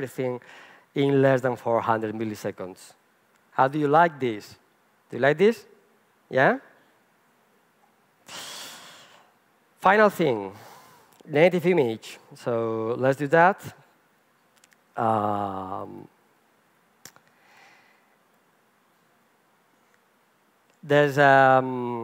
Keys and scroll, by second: 14.2 alt+F12.